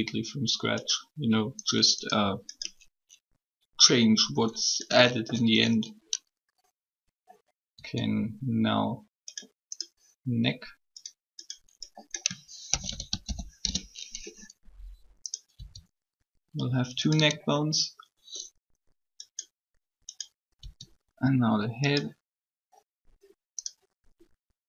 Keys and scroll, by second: 7.7 e, 12.4-14.1 typing, 15.5 e.